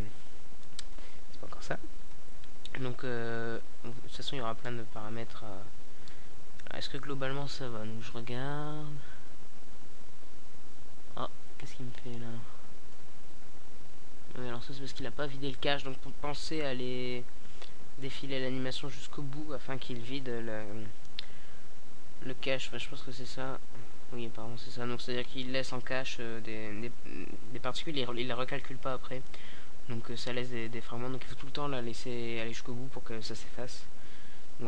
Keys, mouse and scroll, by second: 1.0 middle drag, 1.4 middle click, 2.3-3.8 drag, 4.6 alt+a, 9.1 alt+a, 12.5 alt+a, 31.6 alt+a, 32.3 KP_0.